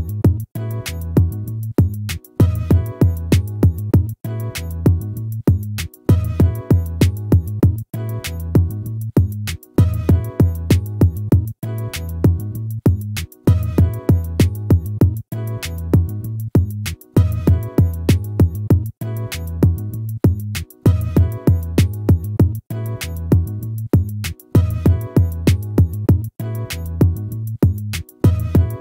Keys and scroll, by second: 4.0 ctrl++, 7.9 ctrl++, 17.6 ctrl+-, 21.6 ctrl++, 26.2 ctrl+-.